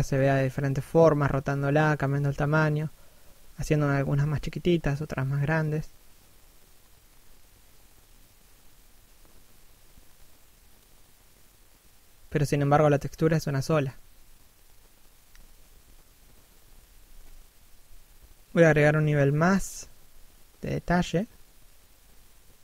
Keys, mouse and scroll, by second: 0.7 scroll down 1, 0.9 middle click, 1.9-2.4 scroll up 1, 2.4 click, 5.2 middle click, 7.7 click, 10.3 middle click, 12.0-12.4 scroll up 1, 12.4 middle click, 18.6 shift+middle click, 20.2 middle click, 20.7 scroll up 1.